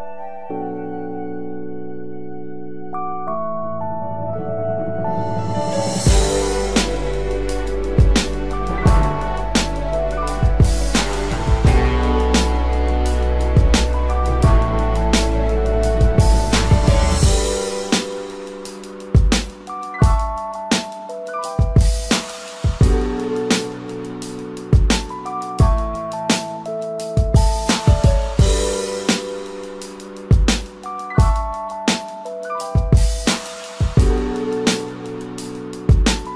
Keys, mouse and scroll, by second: 0.0 Left, 0.2 Left, 1.8 Down, 2.0 Down, 3.1 Up, 4.0 Up, 5.2 Down, 5.3 Down, 6.3-7.4 scroll up 1, 7.4 Return, 13.2 ctrl+t, 14.0 Down, 14.2 Down, 18.1 Return, 19.1 Down, 20.6 Down, 21.6 Up, 22.2 Down, 32.5-33.6 typing.